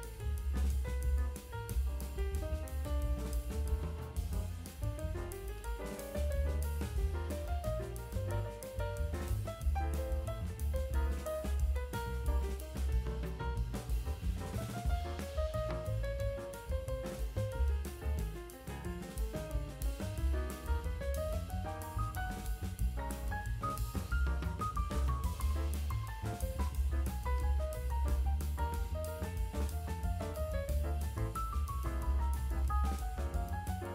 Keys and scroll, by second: 0.8 5, 5.9 F9, 8.2 ctrl+alt+z, 8.5 [, 10.4 ], 14.5 space, 17.4 space, 19.3 space, 21.2 space, 22.9 space, 23.5 space, 25.8 space, 26.6 space, 28.0 [, 28.2 space, 32.7 space.